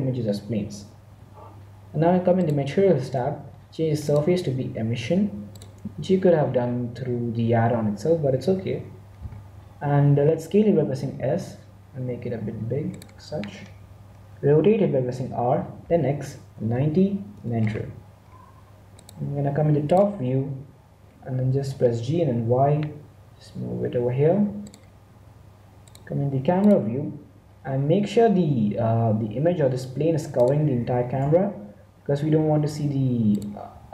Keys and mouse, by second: 0.8 click, 2.3-5.9 drag, 10.9 s, 15.1 r, 21.5 g, 24.6 click, 27.5-29.0 middle drag, 29.0 s, 30.7 g, 33.6 s.